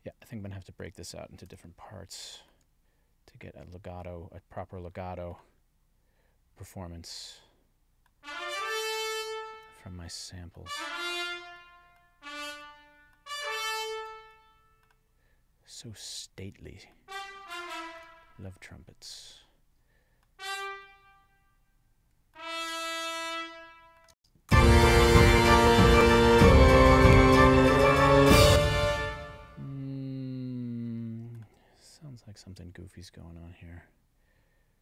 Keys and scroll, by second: 24.1 space, 28.4 space.